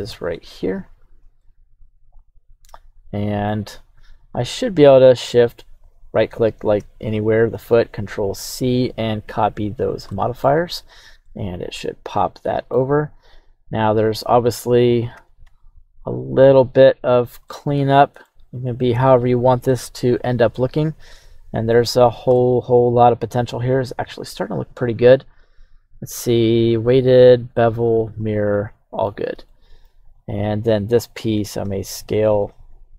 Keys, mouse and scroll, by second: 0.7 shift+drag, 1.4-3.5 middle drag, 4.0-4.3 scroll up 2, 4.3 scroll down 1, 5.9 shift+right click, 8.0 ctrl+c, 9.8 scroll up 1, 10.1-10.6 middle drag, 10.6 right click, 11.2-12.8 middle drag, 13.2 right click, 14.2-14.6 middle drag, 15.2 s, 15.4 x, 17.1-17.5 drag, 17.5-18.4 middle drag, 18.8-19.7 scroll up 2, 19.2 right click, 19.7-21.8 middle drag, 22.3-24.3 middle drag, 25.7-27.0 scroll down 1, 27.0 scroll down 4, 28.2-28.5 scroll down 1, 28.5-29.1 middle drag, 29.0 scroll up 2, 29.5-29.8 shift+middle drag, 30.1 right click, 31.4 s, 32.5 z.